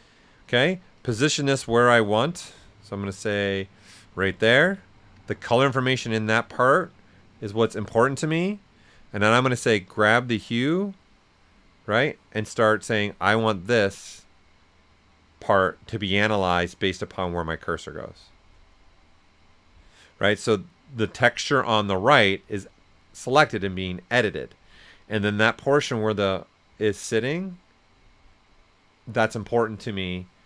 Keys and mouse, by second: 0.9-6.9 ctrl+drag, 0.9 typing, 10.0-13.4 ctrl+drag, 10.0 typing, 13.4-23.5 ctrl+drag.